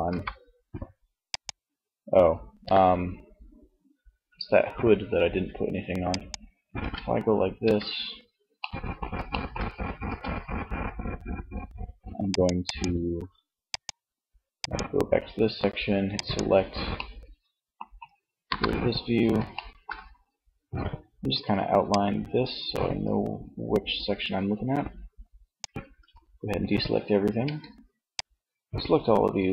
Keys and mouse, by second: 5.9 ctrl+Tab, 7.0 Tab, 9.0 a, 16.0 middle click, 17.3 ctrl+KP_1, 20.8 d, 25.1 a, 26.4 c.